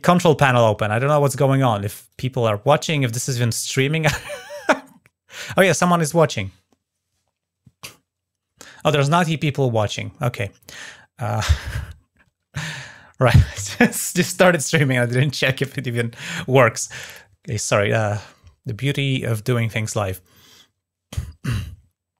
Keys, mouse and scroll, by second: 0.7 click, 1.8 click.